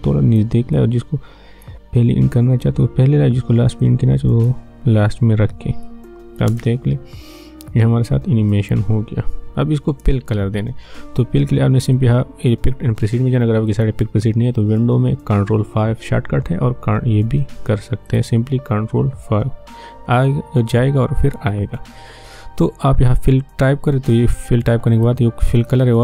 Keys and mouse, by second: 6.5 space, 9.9 space, 11.9-13.7 drag, 18.1 click, 19.6 ctrl+5, 24.2 click.